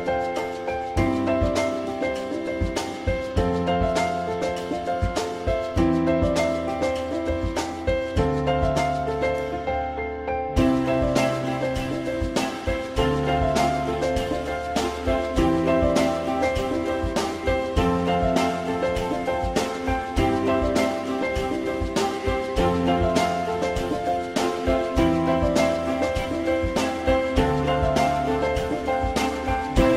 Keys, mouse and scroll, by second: 1.9 alt+x, 3.8 alt+middle click, 7.2 shift+click, 8.2 shift+click, 9.3 shift+click, 9.5 shift+double click, 13.8 ctrl+click, 16.6 alt+middle click, 20.6 alt+middle click, 24.2 alt+middle click, 27.1 F4, 27.4 alt+middle click.